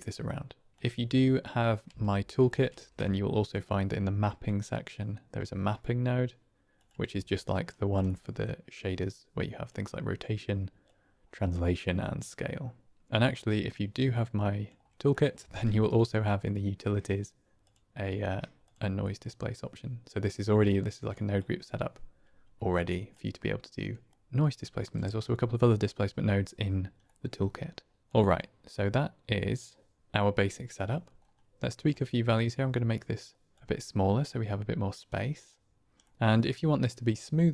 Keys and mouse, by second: 1.8-2.9 typing, 7.3-7.6 alt+drag, 8.1 middle click, 9.6 click, 10.8 click, 11.9 click, 12.3 middle click, 13.7 middle click, 15.1 click, 15.5 shift+a, 19.1-20.4 middle drag, 20.4 click, 21.1 click, 22.6 click, 24.1 typing, 27.1 middle click, 28.0 drag, 28.9 click, 30.4 middle drag, 31.9-33.4 shift+drag, 35.1 click, 36.0 click.